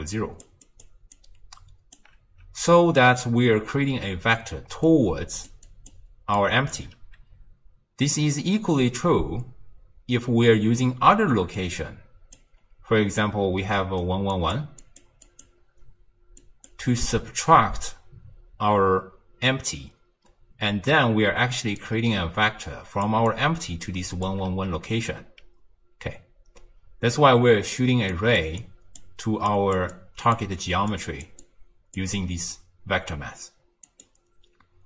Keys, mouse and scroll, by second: 0.0-2.1 typing, 0.7 click, 1.2 click, 4.2-4.8 d, 4.9-5.5 drag, 5.5-6.2 d, 5.7 click, 5.9 d, 6.4 click, 6.8 d, 11.1 d, 11.6-12.4 drag, 12.4-17.1 typing, 13.8 right click, 14.4 click, 14.9 click, 15.3 click, 16.4 click, 21.3 d, 21.8 d, 21.8-23.1 drag, 23.1 d, 23.3 click, 24.3 d, 27.9-32.1 typing, 28.2 click, 28.6 click, 29.5 click, 30.0 click, 30.9 click, 31.5 click, 33.1 d, 33.9 click.